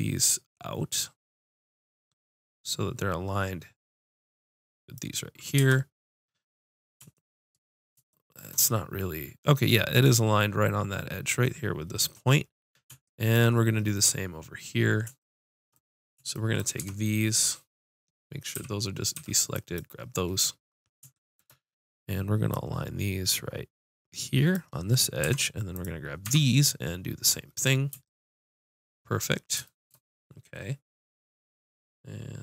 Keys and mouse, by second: 5.6 Tab, 16.8 Tab, 18.6 a, 19.2 b, 22.4-24.5 drag, 25.2 Tab, 25.8 click, 26.3 Tab, 31.4-32.4 drag.